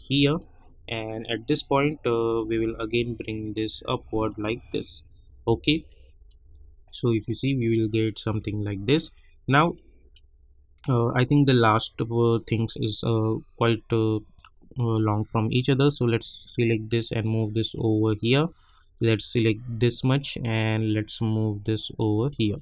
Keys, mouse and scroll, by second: 6.4 space, 9.2 scroll down 1, 9.8 click, 10.4 scroll down 1, 13.3 scroll up 1, 16.2-17.7 drag, 17.7 scroll up 1, 18.6-22.6 drag.